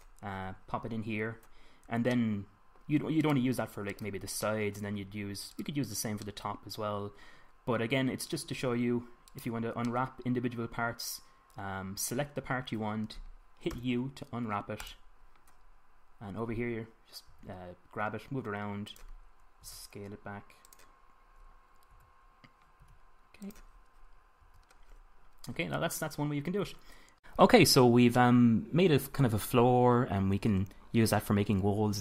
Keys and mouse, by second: 0.1-2.9 middle drag, 5.4-7.5 middle drag, 7.9 middle click, 9.2 middle click, 10.2 click, 13.3-14.5 drag, 14.5 u, 18.2 g, 19.8 click, 20.5 s, 21.3 click, 22.7 f, 23.7 g, 24.3 click, 25.3 Tab, 28.3-32.0 middle drag.